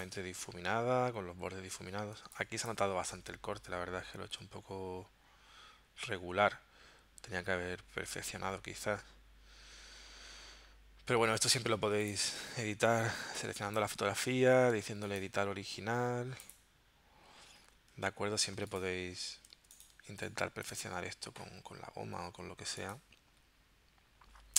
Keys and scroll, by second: 2.2 space, 11.7 v, 12.4 space, 18.6 z, 19.6 space.